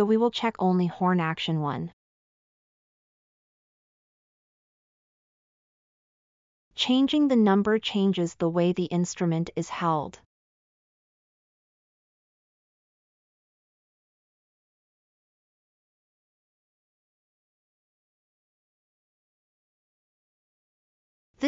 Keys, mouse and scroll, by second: 11.9-12.5 scroll up 2, 12.6 scroll, 13.2-14.2 scroll.